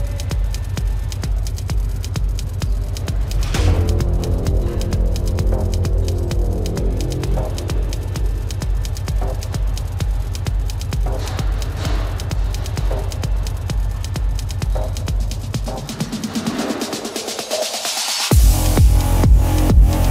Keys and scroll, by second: 0.2 space, 2.7 space, 4.8 space, 5.6 ctrl+alt+z, 9.2 space, 12.2 ctrl+alt+z, 12.4 space, 16.4 space, 19.0 space.